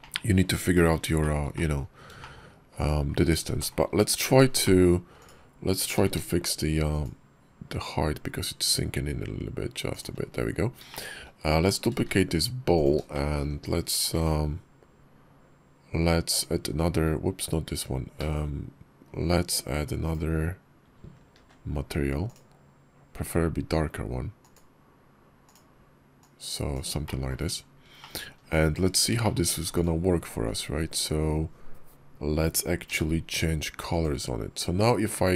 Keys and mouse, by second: 1.0 shift+click, 1.4 click, 2.1 shift+click, 2.6 click, 3.4 shift+middle click, 4.5 shift+middle click, 5.0 click, 6.9 shift+d, 10.7 shift+click, 11.5 click, 12.0 shift+d, 13.0 shift+click, 14.0 alt+m, 21.2 alt+m, 24.2 click, 25.3 click, 26.9 shift+drag, 27.8 shift+click, 29.1 shift+click, 29.6-32.8 drag, 33.9 d.